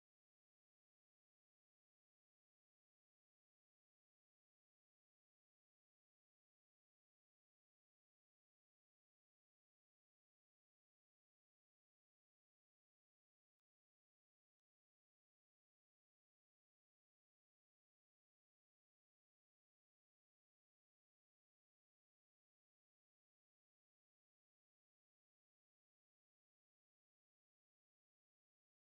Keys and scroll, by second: 2.8 Delete, 3.0 ctrl+a, 10.3 ctrl+c, 10.4 ctrl+v, 13.0 ctrl+d, 16.6 shift+5, 16.9 ctrl+z, 19.5 ctrl+z, 20.1 ctrl+g, 20.8 ctrl+z, 21.7 ctrl+d, 22.9 Delete, 23.6 ctrl+d, 24.6 ctrl+d, 25.9 Delete, 28.7 ctrl+g.